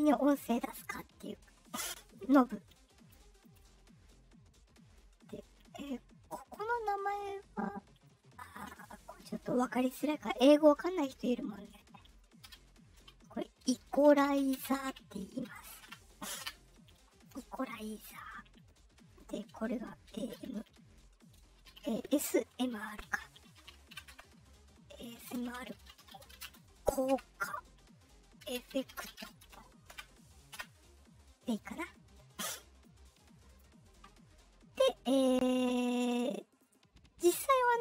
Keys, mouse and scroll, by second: 7.9 scroll down 1, 12.9-15.2 typing, 15.3 F8, 15.7 Return, 16.3 Return, 18.5 middle click, 20.0 shift+a, 21.4 shift+s, 21.8 shift+BackSpace, 22.2 shift+s, 22.6 shift+m, 23.7 shift+r, 24.0 Return, 25.2-26.8 typing, 27.0 Return, 28.1-29.6 typing, 29.8 Return, 30.5 Return, 32.8-33.5 drag, 36.5-37.8 drag.